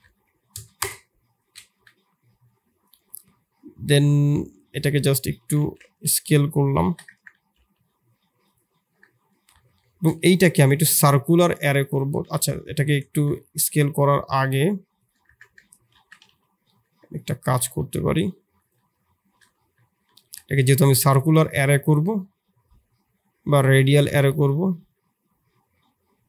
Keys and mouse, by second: 1.7 KP_7, 2.8-4.7 drag, 4.7 s, 5.4 g, 7.3 s, 9.8 shift+click, 10.3 q, 11.9 ctrl+z, 12.2 ctrl+z, 13.5 s, 15.2 Tab, 15.7 g, 17.3 s, 19.0 shift+z, 19.6 Tab, 20.6 q.